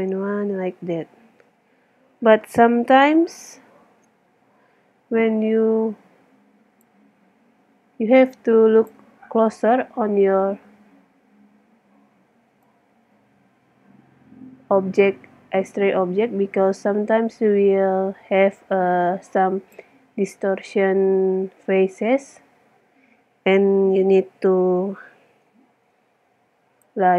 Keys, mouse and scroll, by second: 5.2-6.8 middle drag, 6.8-8.4 drag, 9.6-12.7 middle drag, 12.7 click, 12.9 middle click, 13.3 click, 13.5 middle click, 18.3 middle click, 21.7-25.1 middle drag, 26.8-27.1 drag.